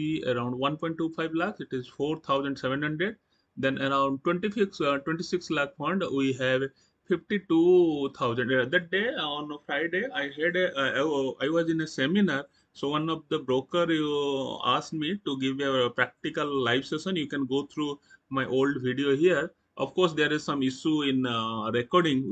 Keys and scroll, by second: 2.7 Right.